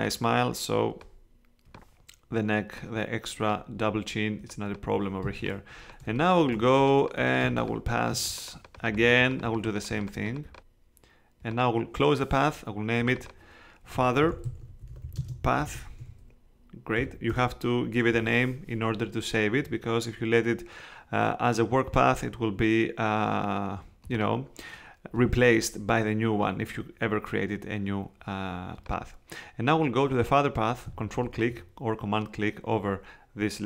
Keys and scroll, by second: 5.2 space, 7.4 space, 14.0-17.0 typing, 17.3 Return.